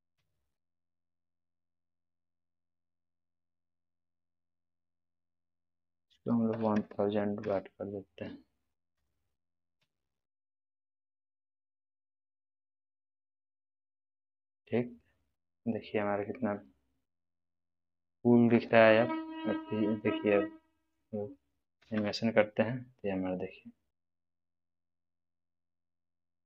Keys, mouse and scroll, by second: 0.1 g, 1.7 click, 11.6 click, 11.6-12.2 middle drag, 13.5-14.4 scroll down 2, 14.4-15.0 middle drag, 15.4-16.0 scroll up 2, 16.2-18.8 middle drag, 18.6 scroll up 1, 20.3-20.9 middle drag, 21.8 space, 24.5 space, 24.5-25.4 middle click, 25.7 scroll down 1, 26.2-26.4 middle drag.